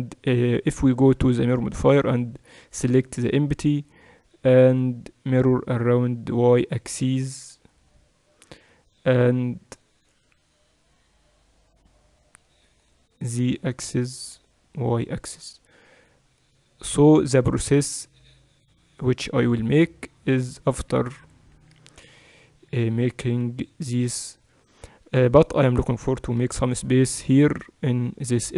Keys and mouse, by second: 2.2-4.0 drag, 6.4-16.6 drag, 16.6-20.7 middle drag, 20.7-22.6 typing, 26.4 KP_7, 27.2-28.5 middle drag.